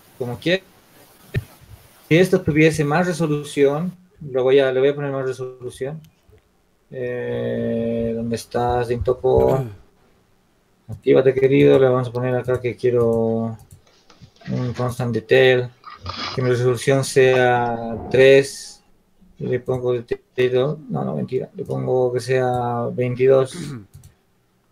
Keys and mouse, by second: 1.2-5.9 drag, 2.0 ctrl+z, 5.9-6.9 middle drag, 11.3-19.6 drag, 21.9-24.7 drag.